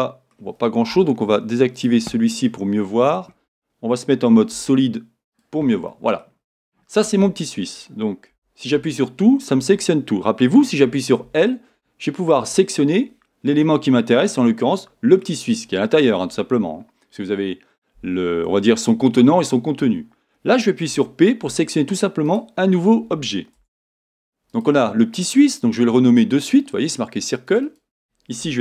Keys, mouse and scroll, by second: 0.3-1.8 scroll up 2, 1.8 click, 1.9-24.5 middle drag, 4.5 z, 6.4-8.3 scroll up 2, 8.3 a, 11.2 l, 13.2-13.6 scroll down 2, 20.9 p, 23.6 Tab, 24.5 click, 25.1 click, 27.5 click, 27.6-28.6 drag.